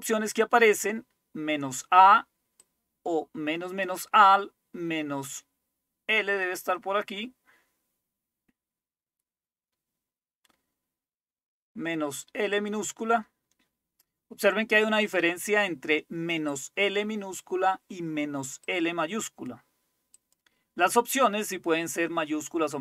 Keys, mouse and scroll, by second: 0.0-1.6 scroll down 2, 1.6-2.2 scroll down 1, 2.2-2.6 scroll down 1, 2.6-3.9 drag, 6.3-7.6 scroll down 2, 7.6-11.2 scroll down 3, 11.2-11.8 scroll down 1, 11.8-12.4 scroll down 1, 12.4 scroll down 1, 12.6-14.1 drag, 16.5 click, 18.7-22.8 drag.